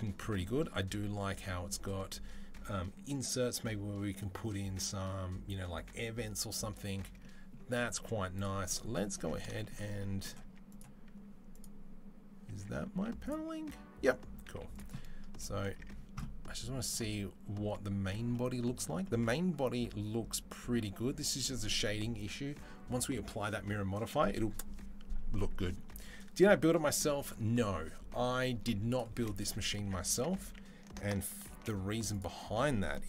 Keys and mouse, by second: 9.0 Tab, 10.3 Tab, 10.5 click, 10.6 middle click, 11.3 click, 11.5-33.0 middle drag, 12.7 z, 14.3 z, 15.5 Tab, 29.9 Tab, 30.2 a, 31.4 alt+h.